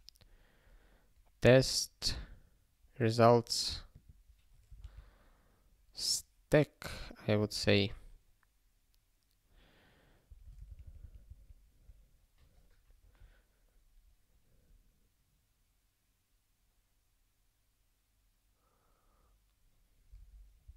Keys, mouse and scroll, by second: 0.5-0.8 scroll up 1, 3.9 click, 4.8 ctrl+f, 7.4 ctrl+n, 7.6 ctrl+n, 10.2 ctrl+p, 10.7 alt+f, 10.8 alt+f.